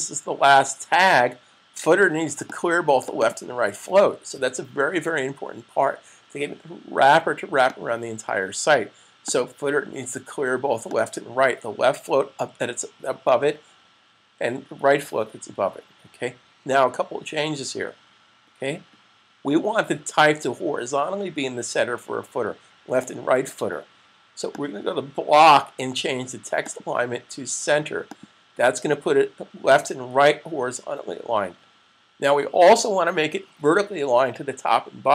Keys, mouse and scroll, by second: 2.5 click, 3.1 double click, 7.5 click, 24.4 click.